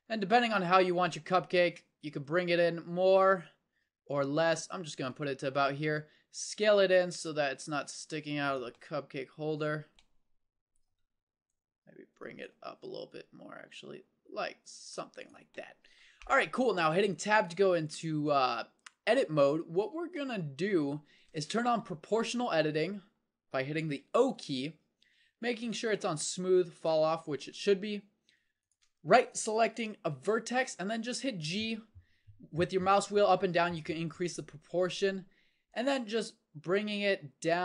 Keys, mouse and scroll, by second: 3.6-5.0 middle drag, 6.3 s, 11.5 middle click, 12.8 s, 17.2 Tab, 19.1-20.2 middle drag, 24.3 o, 30.9 g.